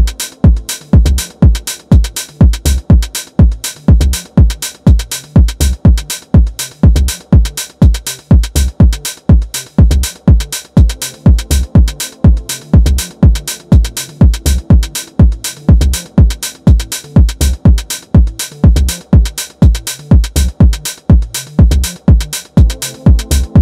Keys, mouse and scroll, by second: 1.4-3.5 right drag, 3.5-4.6 middle drag, 4.6 s, 5.8-8.8 middle drag, 8.8 KP_7, 9.5-11.6 shift+middle drag, 11.6 e, 17.7 click.